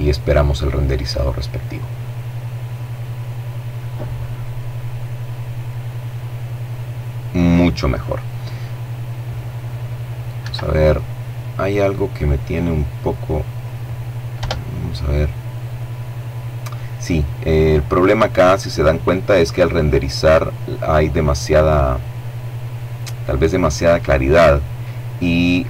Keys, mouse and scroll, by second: 9.1 Escape, 11.3-12.9 drag, 13.1 F12.